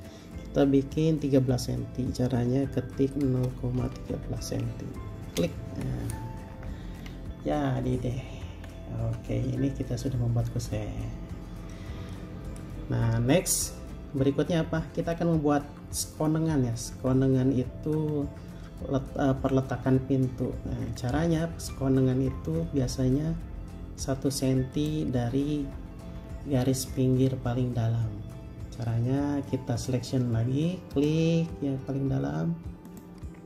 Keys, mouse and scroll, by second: 3.5-4.6 typing, 5.5 Return, 6.7 space, 7.2-8.7 scroll down 1, 8.7 Escape, 14.3 scroll up 1, 14.3-14.8 scroll down 1, 15.1-16.3 scroll up 1, 22.2-22.5 scroll down 1, 22.5-25.8 scroll up 1, 26.4-27.0 scroll down 1, 30.4 scroll down 1, 31.1 ctrl+click, 33.1 ctrl+click.